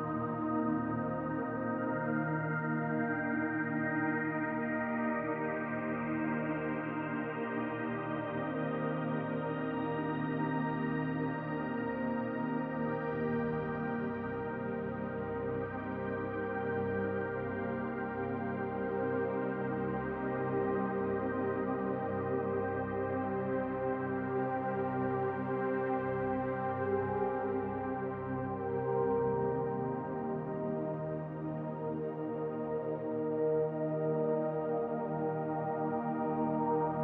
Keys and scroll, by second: 26.3 alt+w, 28.1 w, 28.8 shift+j, 29.3 g, 36.6 ctrl+a.